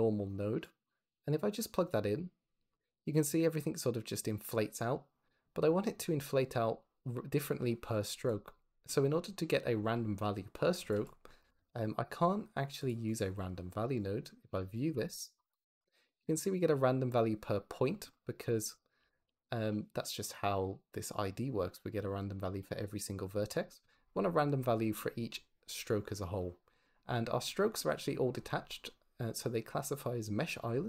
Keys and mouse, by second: 0.7 click, 8.2 click, 10.6 shift+a, 13.8 ctrl+shift+click, 14.4 ctrl+shift+click, 15.5 ctrl+shift+click, 18.4 click, 18.9 g, 19.1 x, 19.9 click.